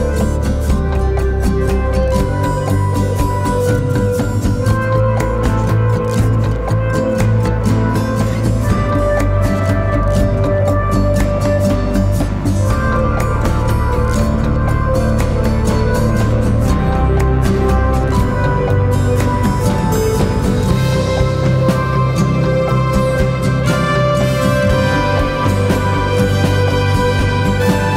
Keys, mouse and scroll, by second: 3.5 Return, 8.4 double click, 21.3 double click.